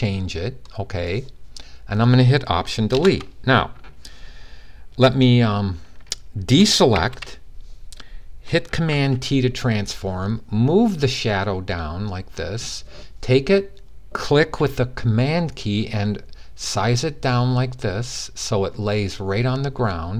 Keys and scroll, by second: 6.7 d, 8.7 super+t.